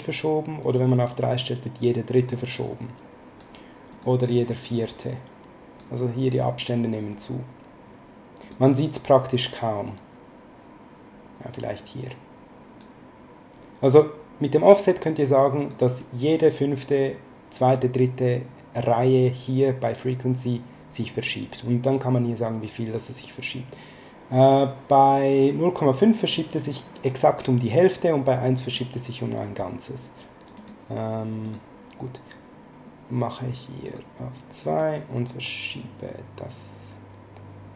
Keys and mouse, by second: 0.6 click, 3.9 click, 8.4 click, 14.0 click, 21.5 click, 28.3 click, 30.5 click, 33.8 click.